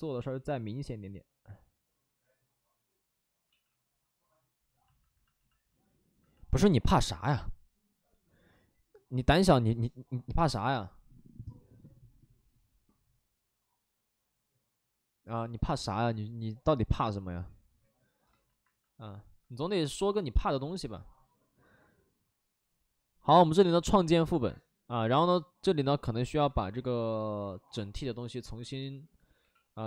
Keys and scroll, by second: 3.4 ctrl+z, 25.9 shift+f, 26.1 shift+f, 27.5 ctrl+w, 29.3 x.